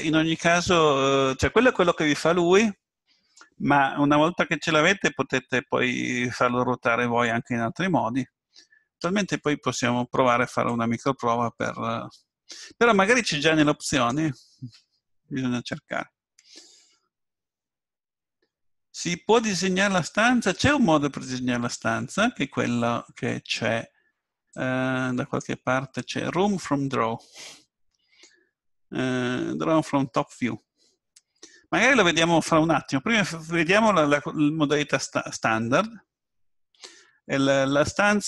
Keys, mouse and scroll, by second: 10.7-12.6 drag, 24.5-33.6 drag.